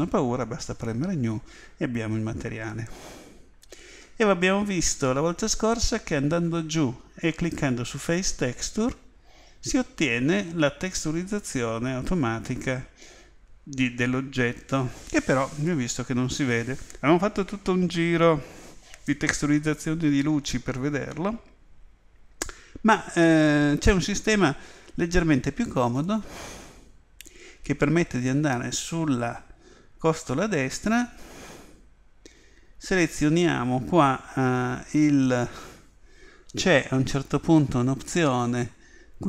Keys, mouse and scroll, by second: 4.4-7.2 middle drag, 8.0 click, 26.0 click, 30.7-34.8 scroll down 1, 34.8-36.1 scroll down 1, 36.1-38.7 scroll up 1, 38.7 scroll up 1.